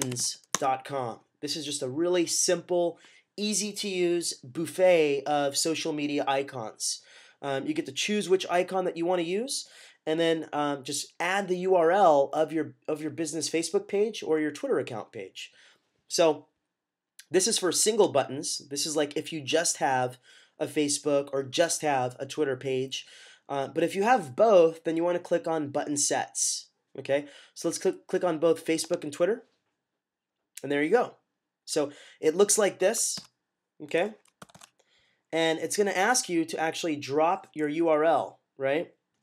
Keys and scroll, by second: 0.0-0.6 typing, 33.1 -, 34.3 super+=, 34.4 super+=.